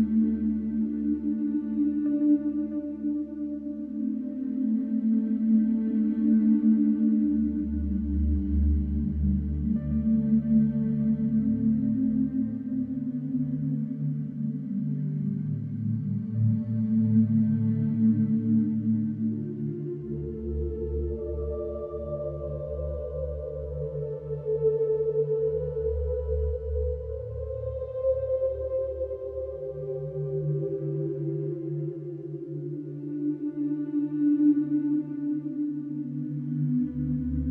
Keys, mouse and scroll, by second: 0.6 click, 1.5 click, 1.9-2.9 scroll, 4.4 scroll, 5.1 scroll, 5.6 Escape, 6.8 click, 8.9 click, 10.8 click, 12.1-12.4 typing, 12.8 Return, 14.0 Escape, 14.9-15.6 scroll, 16.0-16.6 scroll, 17.1 click, 18.8 click, 20.0 middle click, 20.1 middle click, 20.4 middle click, 21.8 click, 23.7 click, 26.6 click, 27.5 click, 29.7 click, 35.2 click, 36.5 click.